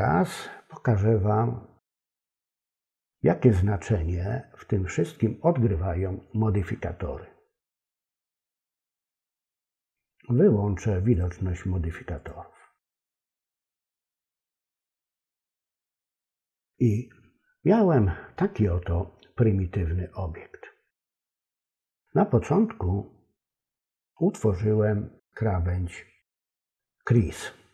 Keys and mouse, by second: 8.8 click, 9.6 click, 11.1 click, 12.2 click, 12.8 click, 13.5 click.